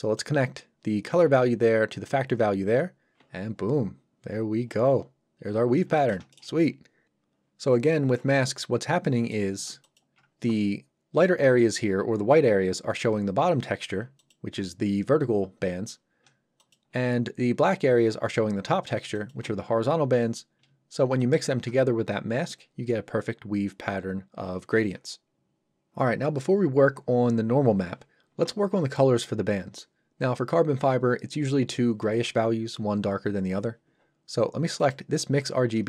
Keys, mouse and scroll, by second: 0.2 click, 3.5-3.9 scroll up 1, 4.6-4.9 scroll down 1, 5.4-5.8 scroll up 1, 6.0 shift+middle click, 6.3 ctrl+middle click, 9.0 middle click, 9.8 ctrl+shift+click, 14.1 ctrl+shift+click, 19.1 ctrl+shift+click, 34.7 click.